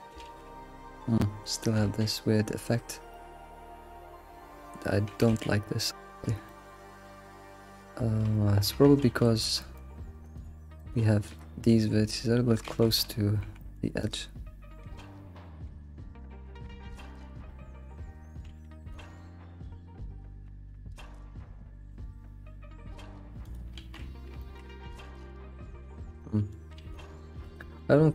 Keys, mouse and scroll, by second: 0.2 alt+shift+z, 0.8-2.0 scroll up 2, 2.0 scroll up 1, 2.0 ctrl+z, 2.7-3.1 scroll down 4, 3.1 middle click, 3.9 alt+shift+z, 4.3-5.1 scroll up 2, 5.1 a, 5.3 a, 6.0 alt+middle click, 6.5 shift+middle click, 6.7 scroll up 2, 8.7 Tab, 9.0 alt+x, 9.7 click, 10.8 click, 11.7 shift+click, 12.6 alt+x, 13.4 g, 14.8 g, 23.8 alt+shift+z, 24.0 scroll down 4, 24.4-25.1 shift+middle drag, 25.1 ctrl+z, 25.6-25.9 scroll down 5, 25.9 ctrl+s, 26.2-26.8 middle drag, 26.8 alt+shift+z, 26.9 middle click, 27.1 middle click, 27.3 alt+shift+z, 27.6 middle click, 27.8-28.1 scroll up 4.